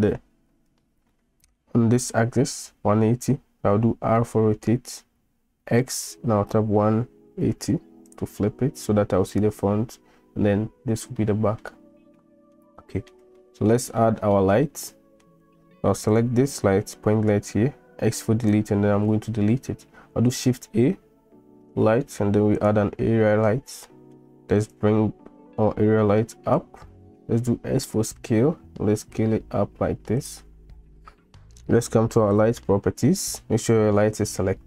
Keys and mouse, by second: 1.1-1.6 middle drag, 1.6 click, 4.0 r, 11.2-11.6 middle drag, 12.2-12.6 middle drag, 12.8-13.1 middle drag, 13.4-13.7 shift+middle drag, 14.0-14.3 middle drag, 14.7-15.2 shift+drag, 17.2 x, 20.3 shift+a, 23.9 middle drag, 24.7-26.7 drag, 27.3 s, 32.4 click.